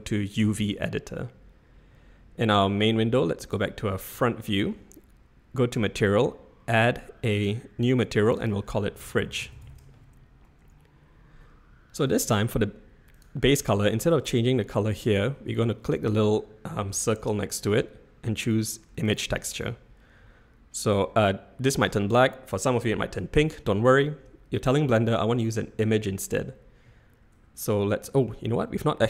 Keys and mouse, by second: 3.4 click, 4.3-4.7 shift+middle drag, 8.2-11.8 drag, 17.5-19.3 drag, 20.2 z.